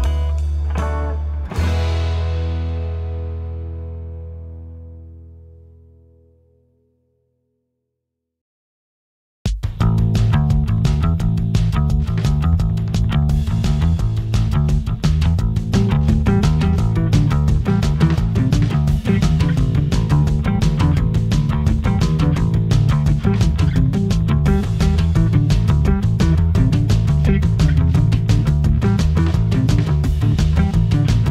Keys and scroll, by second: 5.9 a, 8.1 super+j, 8.5 v, 9.1 shift+Right, 10.5 Left, 12.7 Right, 17.5 v, 20.8 i, 21.9 v, 30.3 a.